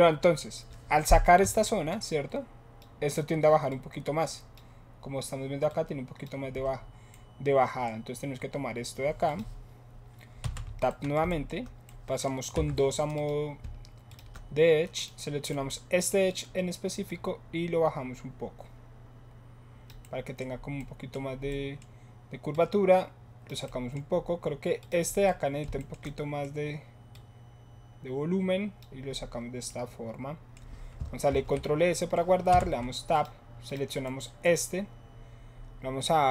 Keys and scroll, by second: 1.5 7, 6.6 7, 10.5 Tab, 12.5 2, 31.2 ctrl+s, 32.4 Tab.